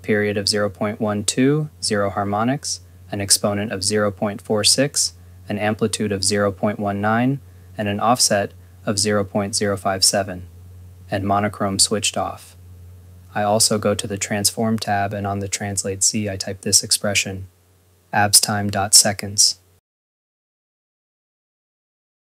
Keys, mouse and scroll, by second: 21.4 click.